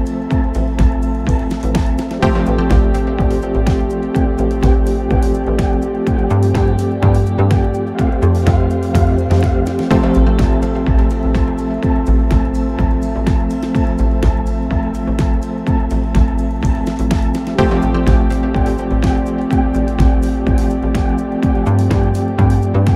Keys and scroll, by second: 0.0 ctrl+d, 0.2 Escape, 1.7 0, 2.1 -, 6.7 shift+h, 6.9 shift+p, 7.2 Return, 9.3 p, 10.9 shift+h, 11.3 Return, 13.6 ctrl+d, 13.8 Escape, 14.6 ctrl+F1, 22.6 ctrl+F1.